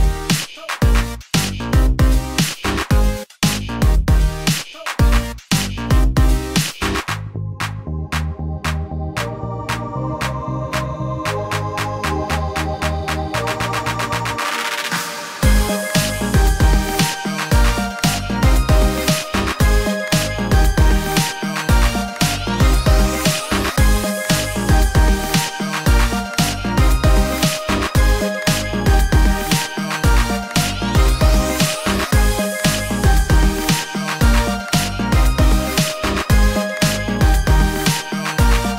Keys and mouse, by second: 0.1 ctrl+click, 0.1 ctrl+right click, 1.2-35.7 shift+right drag, 12.4 shift+click, 17.0 middle click, 20.5 shift+click, 27.3 Tab, 27.9 click, 27.9 middle click, 28.3 click, 28.3 middle click, 28.8-35.7 drag, 28.8-32.9 middle drag, 33.9 middle click, 33.9 q, 34.5 shift+q, 35.0-38.7 shift+middle drag, 35.8-38.7 drag, 35.8-38.7 right drag.